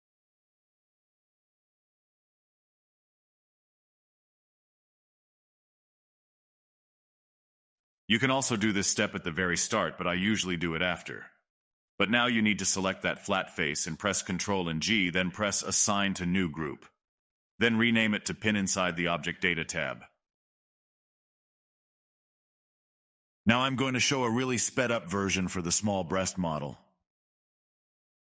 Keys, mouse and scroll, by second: 0.1 click, 0.4 middle click, 1.8 click, 2.1-2.7 middle drag, 2.7 click, 2.8 middle click, 2.9 scroll down 3, 3.1 click, 3.2-3.7 middle drag, 3.7 scroll up 3, 3.8-4.1 middle drag, 4.1 scroll down 2, 4.2 middle drag, 4.5 drag, 4.7 scroll up 5, 4.8 scroll down 2, 4.9 middle click, 5.2 click, 5.3-5.6 scroll up 3, 5.4 middle click, 5.6 shift+middle click, 6.0 scroll up 1, 6.1 middle click, 6.9 w, 7.3 middle click, 7.5 scroll down 3, 7.6 shift+middle click, 8.2 scroll down 2, 8.8-12.2 shift+drag, 12.2-13.3 middle drag, 13.3 scroll down 2, 13.6 middle click, 13.9 ctrl+g, 15.1 middle click, 16.0 scroll down 3, 16.8 scroll down 1, 17.4 click, 18.4 click, 18.6-20.6 drag, 20.6 middle click, 21.4 click, 21.7-24.0 middle drag, 24.0-24.9 drag, 25.2-27.8 middle drag, 27.9 scroll up 3, 27.9 scroll down 7, 28.0 shift+right click, 28.1 click, 28.2 middle click.